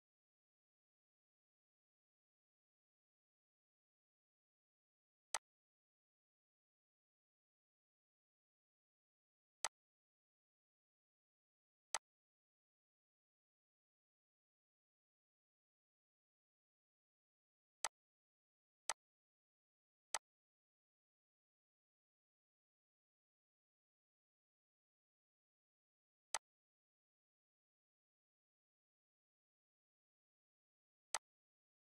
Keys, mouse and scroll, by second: 5.3 click, 9.6 click, 11.9-17.8 drag, 17.8-23.9 drag, 23.9 scroll, 24.8-25.1 scroll down 2, 25.4 scroll up 1, 26.3-31.1 drag.